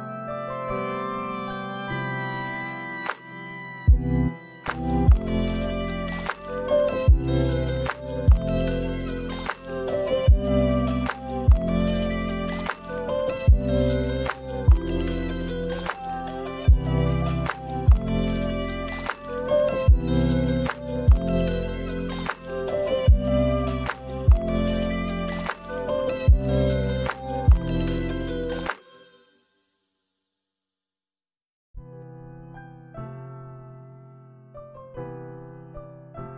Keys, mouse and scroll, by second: 0.8 click, 3.1-3.8 scroll down 1, 3.8-5.4 scroll down 2, 6.1 click, 6.1-7.2 scroll down 1, 7.6 shift+a, 12.6 click, 16.3 click, 17.1 click, 17.6 right click, 18.7-20.1 scroll up 2, 20.3 click, 25.8 click, 26.4-27.5 scroll down 2, 26.7 middle click, 27.5 space, 29.3 space, 29.7 scroll up 2, 31.4 click, 33.5 click, 34.6 click.